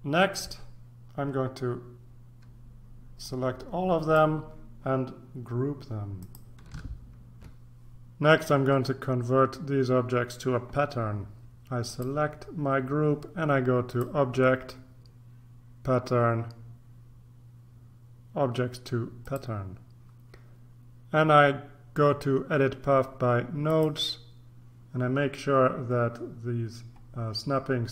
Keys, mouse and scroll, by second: 3.2 click, 6.2 click, 7.4 ctrl+r, 11.8 click, 13.9 click, 19.2 click, 23.7 click.